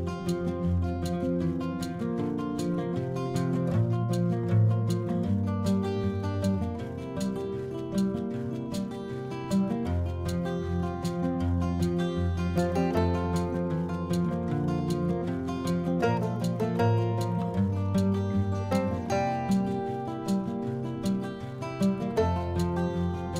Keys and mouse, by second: 7.9 middle click, 8.9 middle click, 9.9 click, 10.3 click, 11.1 click, 13.5 click, 20.9 middle click, 21.7 click.